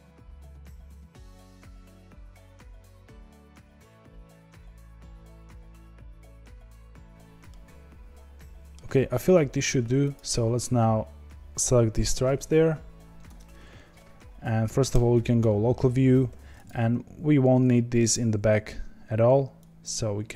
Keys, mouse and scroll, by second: 0.0 click, 0.2 click, 0.3 g, 0.6 click, 0.8 g, 1.4 click, 1.5 g, 2.5-5.3 middle drag, 5.3 click, 5.5 ctrl+b, 6.0 click, 6.2 click, 6.2 ctrl+b, 6.8 Tab, 6.8-7.4 scroll down 1, 7.4-9.0 middle drag, 9.0-10.1 scroll up 3, 10.1 click, 13.2 Tab, 14.9 KP_Divide, 15.5-16.1 scroll down 4, 16.2 2, 16.6 click, 17.3 3, 18.1 click.